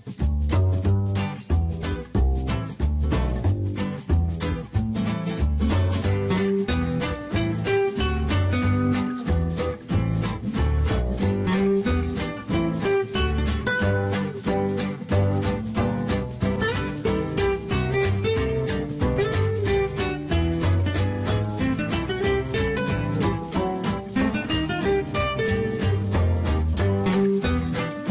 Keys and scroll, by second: 11.5 Escape, 20.3 ctrl+z.